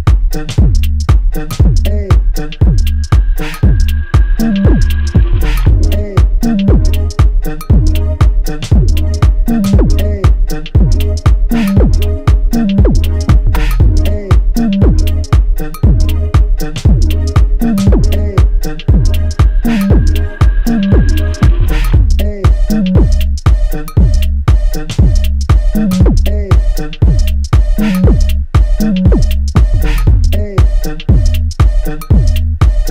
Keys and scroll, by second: 3.6 ctrl+j.